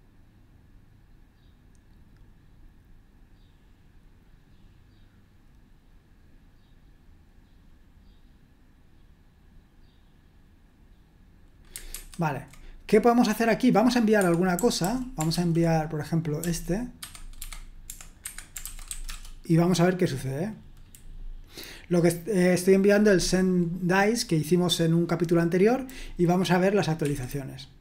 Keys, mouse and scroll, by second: 11.9 super+1, 13.1-14.2 drag, 14.2 Escape, 14.3-17.3 typing, 18.2 Escape, 18.5-19.3 typing, 27.0 F5.